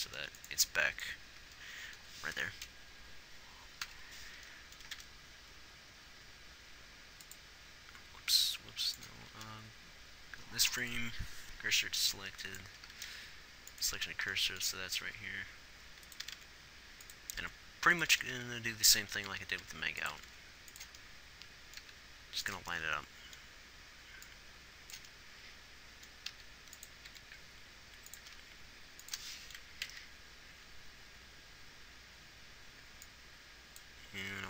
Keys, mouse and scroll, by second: 4.3 Left, 9.7 shift+s, 15.4 r, 16.5 r, 18.5 r, 20.0 r, 20.6 r, 22.2 g, 27.5 r, 28.6 g, 30.4 Right, 30.9 Left.